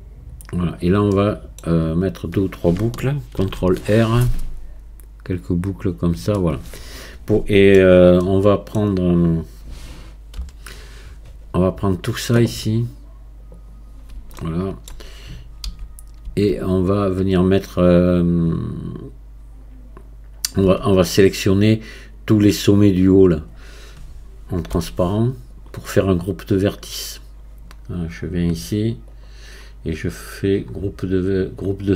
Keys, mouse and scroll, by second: 1.1 middle click, 1.9 scroll down 1, 3.4 ctrl+r, 6.4-10.4 middle drag, 10.4 KP_1, 13.5 click, 14.4-15.7 shift+middle drag, 15.7 a, 25.5 click, 29.1-30.7 drag, 30.7 scroll up 2.